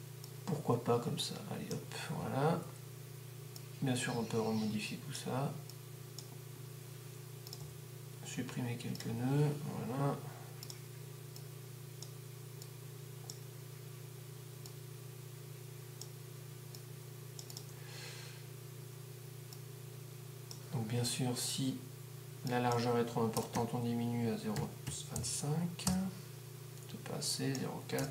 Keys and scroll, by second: 23.6 0, 24.8-26.3 typing, 28.0-28.1 typing.